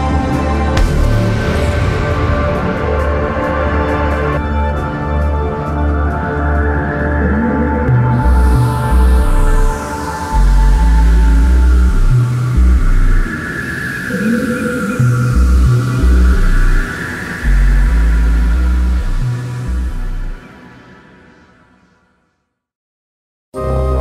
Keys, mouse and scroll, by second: 0.7 middle click, 0.9-2.6 drag, 2.6 middle click, 3.1 middle click, 7.2 Tab, 7.9-9.8 middle drag, 9.8 KP_7, 15.5 middle click, 16.2 Tab, 16.3 middle click, 16.7 click, 17.1 middle click, 17.7 click, 18.1 right click, 18.5-21.9 typing, 19.0 click, 19.3 right click, 20.0 middle click, 20.5 click, 21.5 right click, 22.4 middle click, 22.6 middle click, 23.1 middle click, 23.2 right click, 23.3 v, 23.9 click.